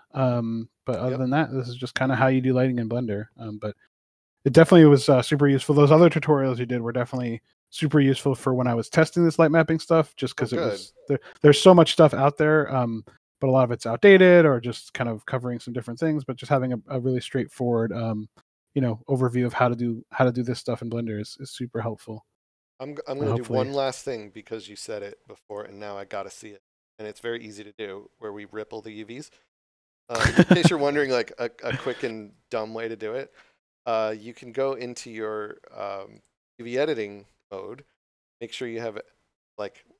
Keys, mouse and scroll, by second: 1.9 click, 4.3 scroll down 1, 30.9 click, 32.1 Tab, 36.0 click, 36.9 scroll down 1, 37.9 middle click, 38.9 a, 39.5 scroll up 1, 39.9 middle click.